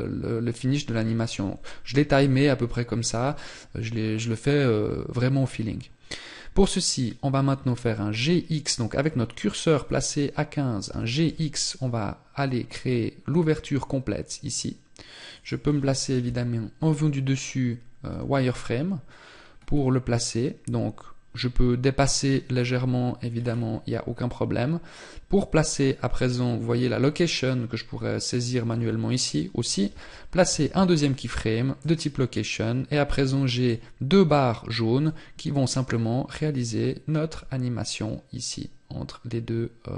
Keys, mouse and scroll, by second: 4.3-7.5 scroll up 1, 15.7 KP_7, 17.6 z, 30.0 i, 32.7 click, 34.5 click.